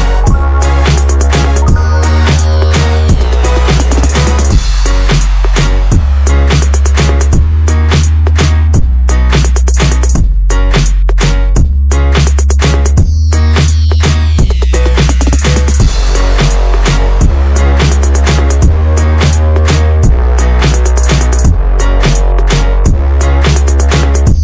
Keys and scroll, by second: 6.0-7.5 typing, 7.9 Escape, 10.6 Escape, 11.4 Escape, 16.7 Escape, 18.9 Escape, 19.1 Escape, 19.2 Escape, 19.2 Escape, 22.2 Escape, 23.7 Escape, 23.8 Escape.